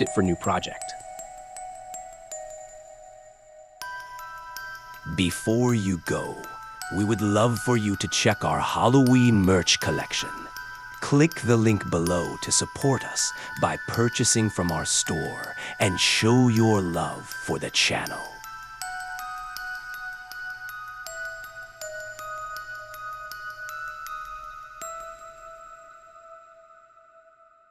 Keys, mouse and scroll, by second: 1.9 click, 8.0-9.0 drag, 9.3 click.